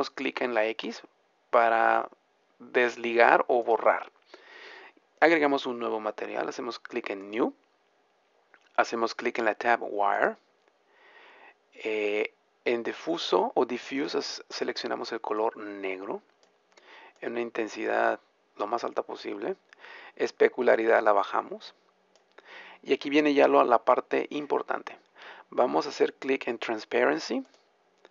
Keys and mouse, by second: 7.2-18.9 drag, 18.9-20.9 middle drag, 20.9-22.9 drag, 22.9-28.1 middle drag.